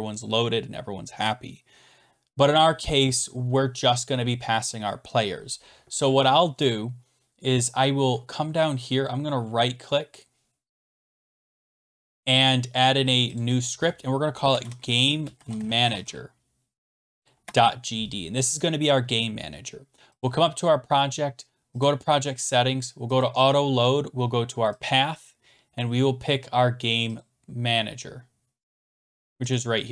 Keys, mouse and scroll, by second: 8.1 scroll down 7, 8.9 right click, 13.4 click, 14.2-16.5 typing, 17.4 Return, 20.2 click, 21.8 click, 23.2 click, 24.8 click, 27.2 click, 29.5 click.